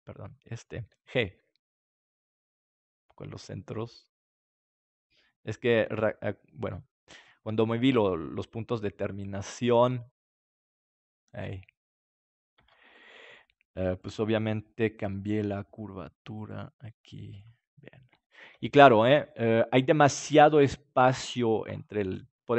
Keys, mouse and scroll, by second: 1.3 g, 5.5-9.1 drag, 5.9 g, 7.9 Tab, 12.5 Tab, 12.9-15.8 right drag, 15.3 g, 17.4-19.2 drag, 18.1 Tab, 18.7 ctrl+s, 21.5 middle click.